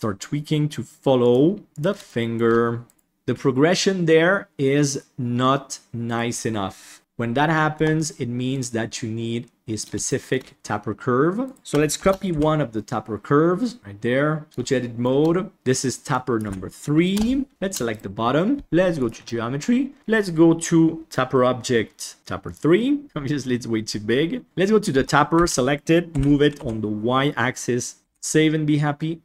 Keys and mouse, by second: 1.7 g, 2.0 shift+middle click, 3.0 ctrl+KP_7, 6.0 right click, 7.0 KP_7, 7.7 Tab, 10.0 shift+middle drag, 11.4 right click, 12.0 shift+d, 14.4 Tab, 14.6 shift+middle click, 15.5 F2, 17.8 right click, 19.2-19.5 middle drag, 21.0 middle click, 22.2 click, 24.9 Tab, 25.3 a, 26.1 g, 28.0 ctrl+s.